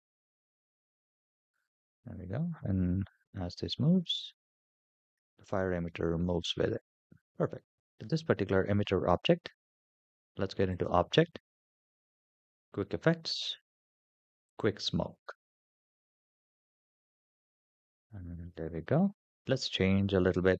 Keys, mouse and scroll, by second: 0.0 scroll down 3, 0.5-1.4 middle drag, 1.7-2.0 scroll down 2, 2.2 shift+middle click, 2.7-3.5 scroll up 6, 3.8 space, 4.1 space, 4.7 scroll down 3, 5.4-5.7 shift+middle drag, 5.9 scroll up 5, 7.7 click, 7.8 /, 10.5-14.7 drag, 15.8-17.7 scroll down 13, 18.2-18.8 middle drag, 19.4 click.